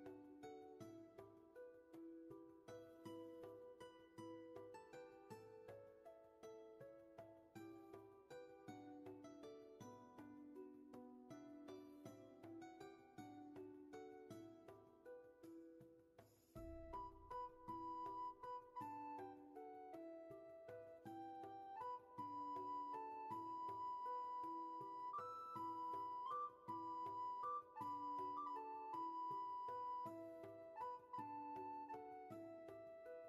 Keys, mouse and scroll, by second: 1.4 ctrl+z, 3.3 ctrl+z, 9.3-10.4 scroll down 1, 10.4 scroll up 1, 15.2 ctrl+z, 16.2-17.6 scroll down 1, 17.6 scroll up 1, 18.3 ctrl+z, 23.3 ctrl+z, 25.0 ctrl+z, 31.7 ctrl+z.